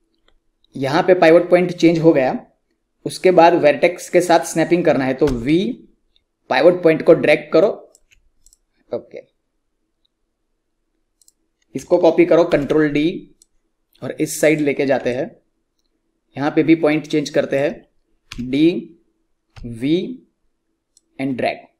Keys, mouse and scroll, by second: 5.2-7.7 typing, 8.4 click, 11.1 click, 12.4 ctrl+d, 13.4-15.0 drag, 15.0-18.3 alt+drag, 18.3 d, 19.5-21.7 typing, 20.9 click.